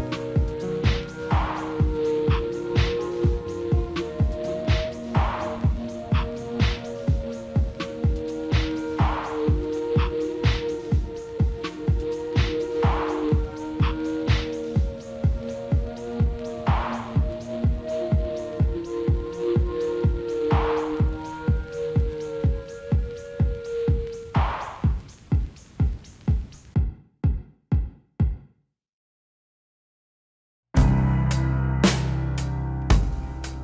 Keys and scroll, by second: 5.2 alt+w, 11.8 alt+x, 23.1 ctrl+z, 32.1 ctrl+z.